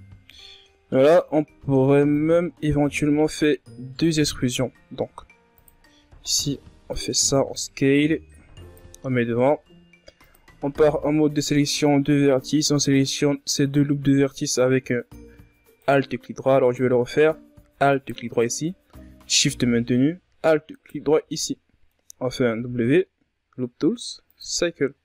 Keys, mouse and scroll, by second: 0.3-0.9 middle drag, 0.9-1.7 scroll up 4, 1.7 KP_1, 2.5-2.9 scroll up 1, 3.2-5.6 drag, 5.6 e, 8.6-11.4 drag, 11.4 ctrl+Tab, 12.4 alt+right click, 13.5 alt+shift+right click, 14.0 scroll down 1, 14.2 middle click, 14.9-16.9 scroll up 2, 16.9 right click, 17.3-19.0 middle drag, 19.0 alt+right click, 21.8 alt+shift+right click, 22.4-25.0 middle drag.